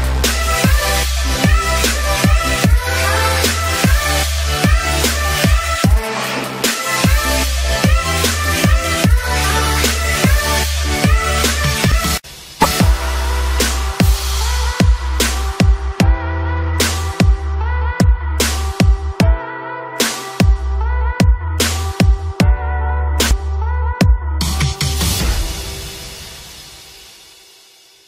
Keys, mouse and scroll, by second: 0.8 ctrl+j, 1.9 click, 9.1-19.5 drag, 20.1 ctrl+e, 20.7 click, 20.9 ctrl+j, 21.2 click, 22.3 ctrl+e, 22.5 click, 22.8 ctrl+j, 23.2 click, 24.5 ctrl+e, 24.6 click, 24.9 ctrl+j, 25.2 click, 26.2 ctrl+e, 26.6 click, 27.0 ctrl+e, 27.2 click, 27.7-28.0 typing, 27.8 ctrl+click.